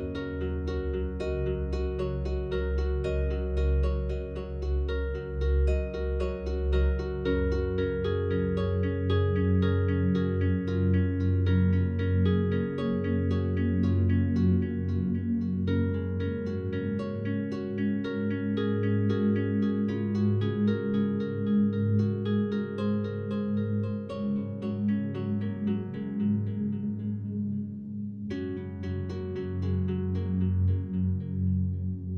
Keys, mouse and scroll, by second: 0.4 a, 0.8 a, 1.0 a, 1.9 shift+right click, 8.1 click, 9.1 a, 10.8 right click, 11.6 shift+right click, 18.3 click, 19.8 a, 20.4 a, 25.0-27.1 alt+drag, 27.1 shift+right click.